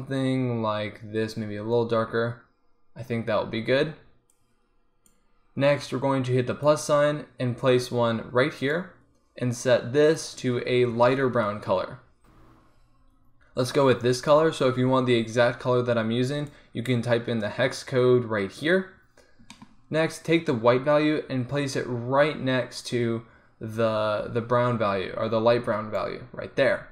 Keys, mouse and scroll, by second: 4.4-9.6 drag, 10.1-11.9 drag, 12.2-16.6 middle drag, 18.4-21.0 middle drag, 21.0-22.8 drag.